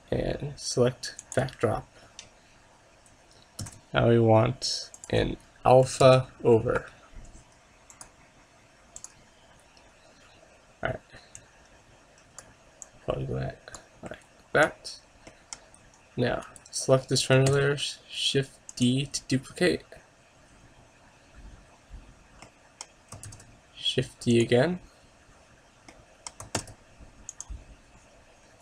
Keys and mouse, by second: 20.7 shift+d, 24.6 shift+d, 27.7 shift+d.